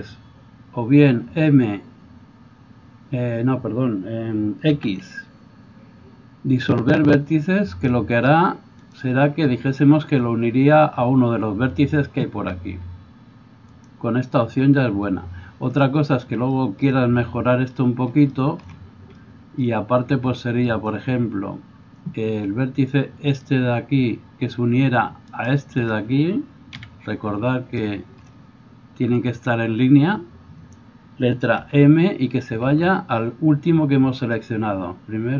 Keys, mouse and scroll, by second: 1.3 x, 4.7 x, 13.9-35.3 middle drag, 25.4 shift+right click, 26.8 KP_Decimal, 31.6 m, 32.7 m.